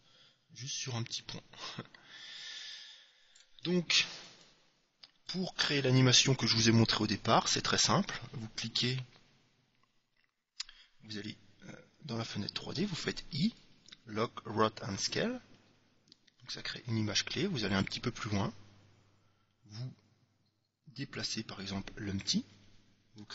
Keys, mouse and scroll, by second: 4.4-6.2 drag, 12.9 i, 17.9-19.6 drag, 19.2-21.1 middle drag, 21.3-22.9 drag.